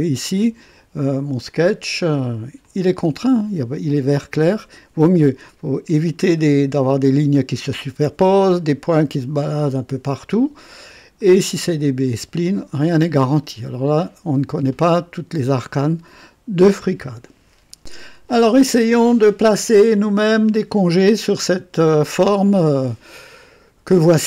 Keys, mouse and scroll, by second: 0.7-1.4 right drag, 2.6 click, 6.2-6.5 scroll up 2, 11.1 click, 13.6 scroll down 1, 14.8-15.6 right drag, 15.8-16.8 drag, 22.0-24.2 drag.